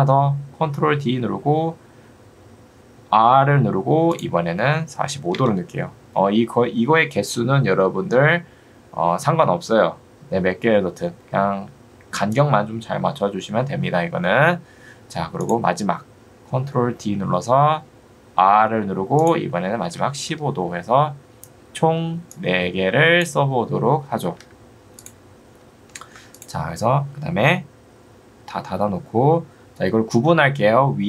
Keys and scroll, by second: 3.4 r, 5.4 Return, 18.4 r, 19.6-20.5 typing, 24.4 Escape, 28.6 u.